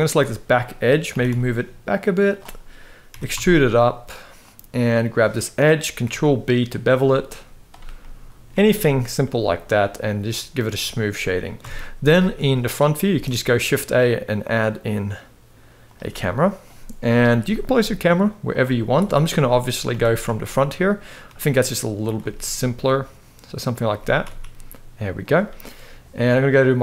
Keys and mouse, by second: 0.8 g, 2.8 e, 4.7 click, 5.7 ctrl+b, 7.7 middle click, 8.2 Tab, 8.5-8.9 middle drag, 9.2-10.3 right drag, 11.3 KP_1, 11.9 shift+middle click, 12.8 shift+a, 16.7 KP_3, 17.4 g, 18.7 KP_0, 19.6 g, 21.9 g, 23.6 g, 26.5 click.